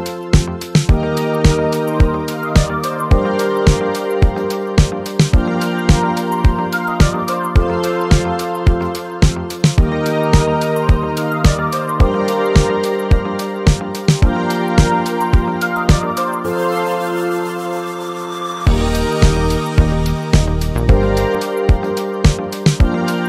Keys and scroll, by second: 0.2 BackSpace, 0.6 e, 2.3 BackSpace, 3.8-16.8 typing, 11.9 Return.